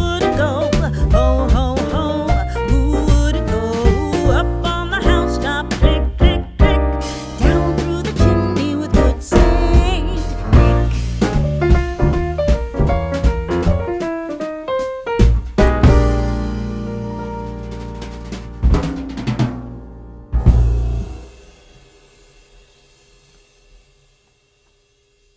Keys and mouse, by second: 0.0 click, 0.5 e, 2.3 click, 2.7 Tab, 3.5 middle click, 4.7 r, 5.6 click, 5.8 g, 6.5 click, 6.8 s, 7.9 click, 8.6 right click, 9.0 click, 10.1 click, 13.1 click, 14.1 middle click, 14.6 Tab, 15.5 g, 15.8 z, 16.6 right click, 16.9 o, 17.7 z, 19.7 click, 20.2 Tab, 21.1 s, 22.1 click, 22.5 g, 22.9 click, 23.1 r, 23.9 click, 24.1 r, 25.2 click.